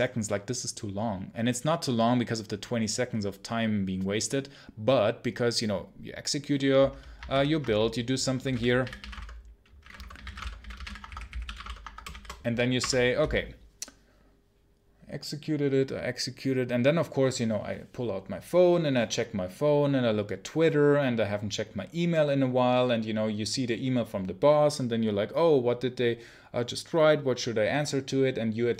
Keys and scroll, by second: 12.7 Return.